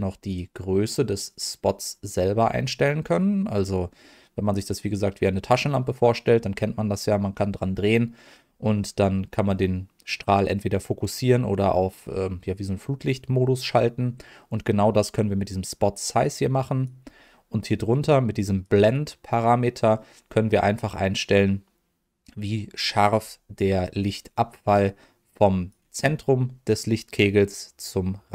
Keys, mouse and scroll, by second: 0.3-16.8 drag, 18.6-23.1 drag, 24.8-25.7 drag, 27.1-28.3 drag.